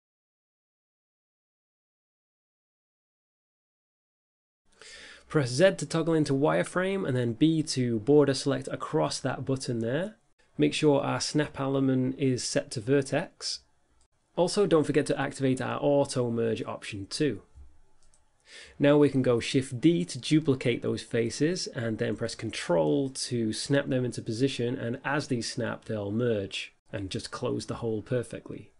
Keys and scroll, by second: 1.9 7, 2.3 KP_5, 2.9 5, 5.1 z, 5.7 b, 7.7 z, 8.3 z, 19.0 shift+d.